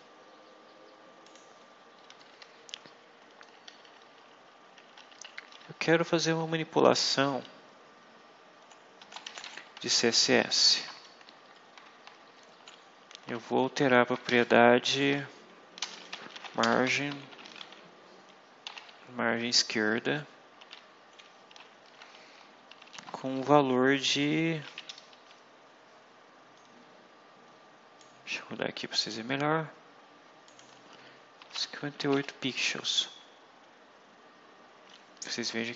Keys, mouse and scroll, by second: 0.4 scroll up 2, 1.1 click, 2.1 Left, 2.8 Delete, 5.0 End, 5.3 Left, 5.8 Delete, 8.9-11.1 typing, 11.3 Left, 13.6 shift+', 14.2 shift+Left, 15.4-18.5 typing, 19.6 Right, 20.5 ', 22.6 shift+', 23.3 shift+Left, 27.9-29.2 drag, 30.4 click, 31.3-32.5 typing.